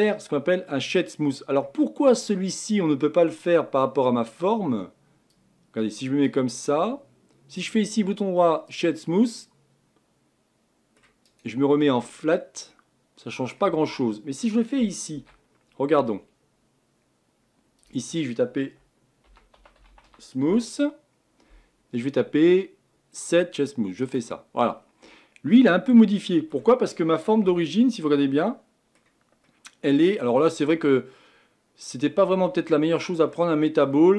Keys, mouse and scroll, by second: 2.9-3.3 scroll up 1, 3.3-8.8 middle drag, 8.8-9.3 right drag, 9.3-12.1 middle drag, 12.1-12.7 right drag, 12.7-13.6 middle drag, 13.6-15.7 scroll up 1, 24.8-25.1 scroll down 2, 25.1-27.5 middle drag, 27.5 Tab, 28.1-30.8 middle drag, 30.8-31.2 scroll down 2, 31.2-33.2 middle drag, 33.2 scroll up 1, 33.3 middle click.